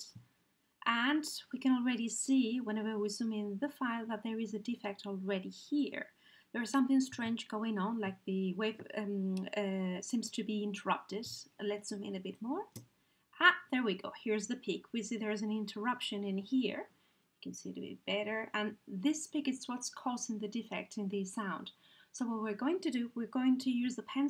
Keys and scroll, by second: 23.6 t.